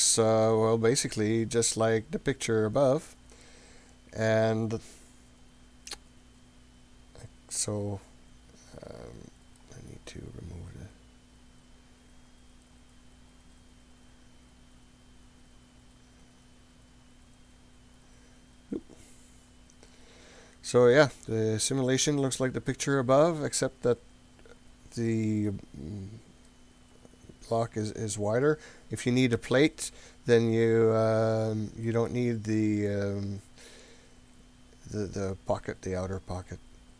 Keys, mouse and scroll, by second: 0.0-1.0 scroll down 4, 1.2 scroll down 2, 1.7 scroll up 2, 1.9-2.6 scroll down 3, 2.6-3.4 scroll up 7, 4.5-9.6 middle drag, 10.7-11.2 scroll up 3, 12.8 click, 13.4 click, 14.1 click, 18.0 click, 19.6 click, 20.3-20.7 scroll down 2, 20.7 scroll up 2, 21.2-22.7 middle drag, 23.0 scroll down 2, 23.4-24.2 scroll up 5, 25.5-26.5 middle drag, 28.7-29.1 scroll down 2, 29.1 scroll up 1, 29.4 scroll down 1, 30.0 scroll down 1, 31.9-35.3 middle drag, 32.5 scroll down 2, 35.6-36.0 scroll down 2, 36.3-36.8 scroll down 2, 36.8 scroll up 1.